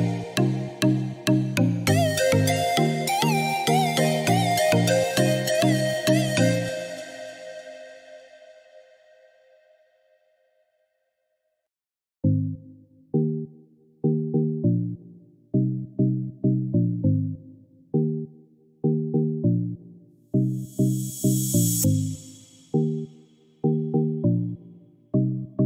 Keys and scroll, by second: 8.5 Escape, 16.6 Escape.